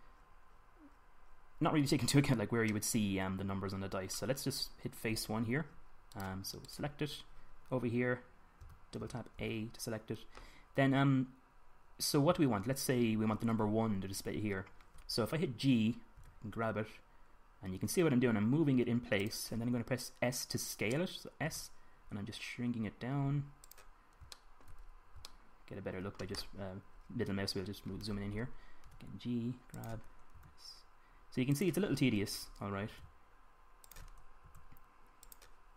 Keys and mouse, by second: 0.9 middle click, 1.6 middle click, 2.5-3.8 drag, 3.8 middle click, 6.9-9.3 middle drag, 9.3 a, 9.9 a, 10.2 a, 16.9 g, 20.1-21.9 drag, 22.2 s, 25.0 click, 29.7 g, 31.2 s, 33.7 g, 35.2 s.